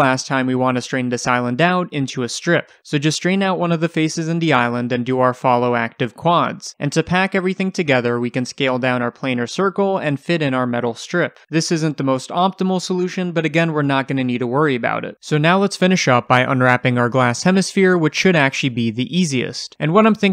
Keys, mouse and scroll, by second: 0.2-3.0 shift+middle drag, 1.3 1, 1.6-2.2 scroll up 2, 2.7 scroll up 2, 3.0 click, 3.2-5.5 typing, 3.5 click, 4.0 click, 4.4 click, 5.2 click, 5.7-6.8 right drag, 6.0-6.6 scroll down 2, 6.6 scroll down 1, 6.8 click, 6.9 g, 7.1 click, 7.4 shift+middle click, 7.7 scroll up 2, 7.9 click, 8.6 s, 9.0 click, 9.2 click, 9.7 s, 10.1 click, 10.3 g, 11.0 click, 12.1-13.3 scroll down 1, 13.3 Tab, 13.6 scroll down 1, 15.1 alt+h, 15.5 scroll down 1, 15.8 click, 16.3 h, 16.7 click, 16.9 h, 17.1 click, 17.4 Tab, 17.7-18.1 scroll up 1, 18.1-20.3 middle drag.